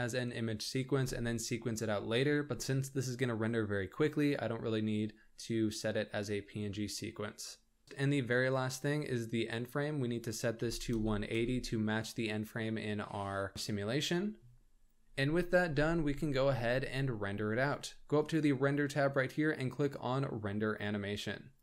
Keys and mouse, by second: 0.4-3.5 drag, 7.8 middle click, 10.5-12.3 drag, 16.7 ctrl+s, 19.0-21.6 drag.